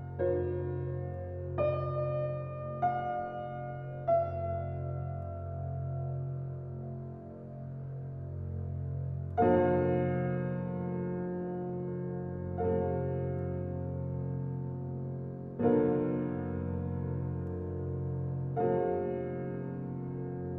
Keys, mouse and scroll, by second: 0.9-1.4 middle drag, 0.9-1.4 scroll, 1.4 Tab, 2.5 click, 3.3 click, 5.4 e, 10.5 click, 11.5 ctrl+b, 16.3 Tab, 16.8 click, 18.0 s.